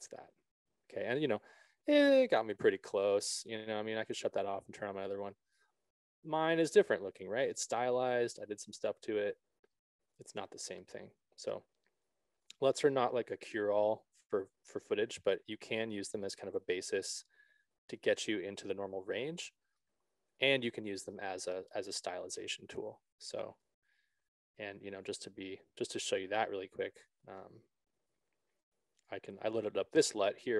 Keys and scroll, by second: 28.5 alt+s.